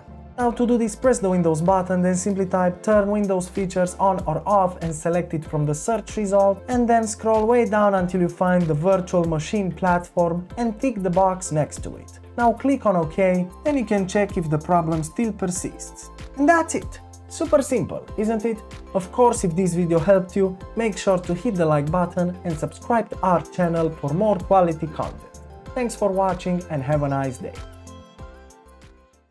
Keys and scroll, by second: 3.2 typing, 4.7 typing.